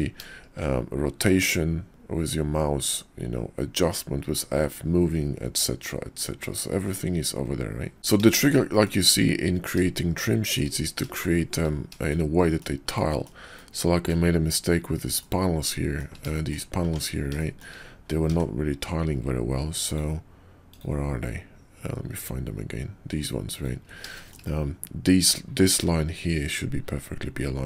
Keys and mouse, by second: 2.8-5.2 drag, 8.0 Tab, 8.4 shift+click, 8.8 shift+drag, 10.1-10.6 shift+drag, 11.2-11.5 shift+drag, 12.1-12.6 shift+middle drag, 12.9 shift+click, 13.5 shift+click, 15.2-16.0 shift+drag, 16.0 shift+middle drag, 16.3 shift+click, 17.0 Tab, 17.3 shift+click, 18.1 d, 24.1 shift+middle click.